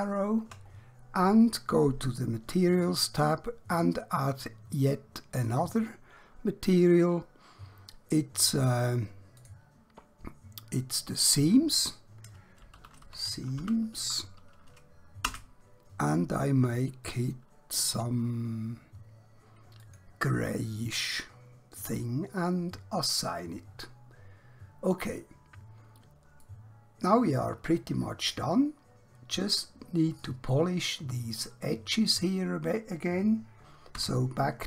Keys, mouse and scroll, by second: 2.7 click, 5.4 click, 8.4 click, 12.8-13.9 typing, 15.4 Return, 17.1 click, 19.8 click, 23.0 click, 25.0 scroll down 1, 25.7 scroll up 1, 26.5 middle click, 29.0-29.5 scroll up 1, 30.4 middle click, 33.9 2.